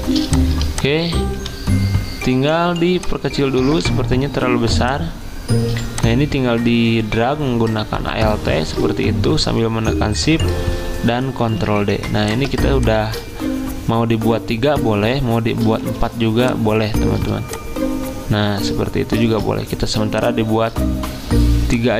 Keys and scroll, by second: 11.5 ctrl+d, 12.6 ctrl+z.